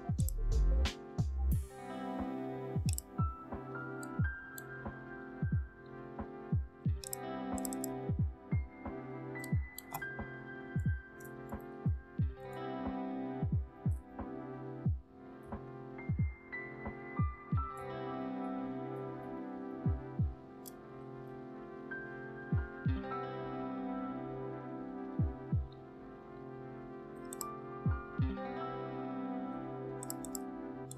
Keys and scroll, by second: 10.0 Right, 10.6 Right, 11.0 BackSpace, 11.6 BackSpace, 12.0 BackSpace, 13.7 ctrl+a, 14.5-15.3 typing, 17.3-20.1 typing.